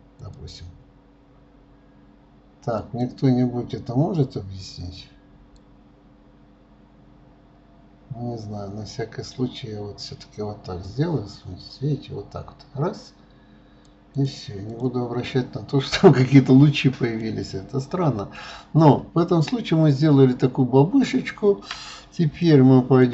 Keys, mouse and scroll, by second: 5.6-8.5 drag, 14.2 click, 14.7 click, 15.2-16.5 scroll down 8, 16.5-17.2 scroll up 2, 17.2-18.8 middle drag, 18.8-20.8 scroll up 2, 20.8-21.7 scroll down 3, 22.4 shift+middle click.